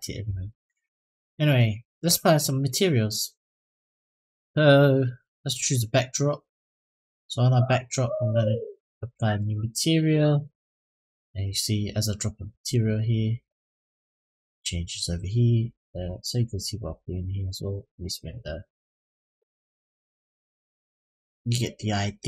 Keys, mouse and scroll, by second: 0.7 click, 2.1-2.8 scroll up 4, 2.8-3.4 middle drag, 4.1 click, 5.2 click, 6.4 click, 7.3 click, 8.5-8.9 drag, 9.9 click, 14.0 click, 15.8 click, 16.7 click, 17.3 middle click, 18.0-18.4 scroll up 1, 18.6 shift+middle click, 19.4 click, 21.4 click.